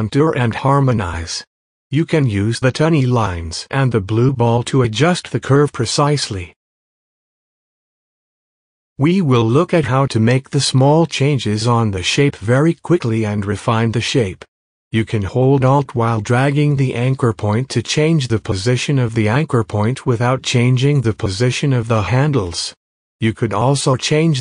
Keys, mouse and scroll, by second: 0.2 space, 0.7 space, 1.5-4.1 drag, 4.1 space, 4.9-7.7 drag, 7.7 space, 7.9 scroll up 1, 8.8 click, 11.5 click, 12.2-17.1 alt+drag.